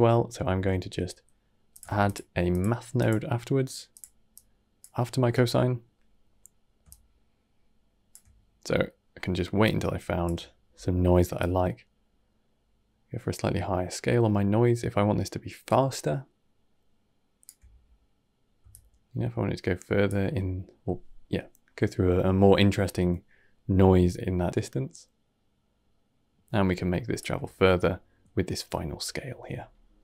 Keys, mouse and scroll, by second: 0.3 shift+a, 1.6 click, 1.7 shift+d, 2.4 click, 2.8-4.2 drag, 6.8-8.5 shift+drag, 8.5 middle click, 9.5-14.3 shift+drag, 18.6-20.5 shift+drag, 20.5-23.5 middle drag, 25.7-28.2 shift+drag, 28.2-29.1 scroll down 6, 29.1 middle click, 29.5 scroll down 1, 29.7 middle click.